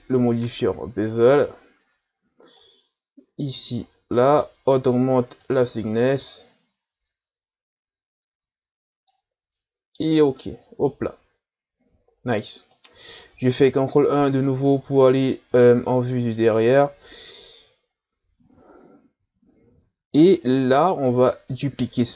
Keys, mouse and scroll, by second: 9.5-10.1 middle drag, 10.1 a, 10.4-12.7 middle drag, 12.7 right click, 13.6 ctrl+KP_1, 14.4-14.9 shift+scroll up 3, 14.9-15.8 middle drag, 15.8-16.1 shift+scroll down 1, 16.1-17.6 middle drag, 17.6 Tab, 18.2 Tab, 18.5 Tab, 19.6 ctrl+Tab, 20.9 right click, 21.5-22.1 middle drag.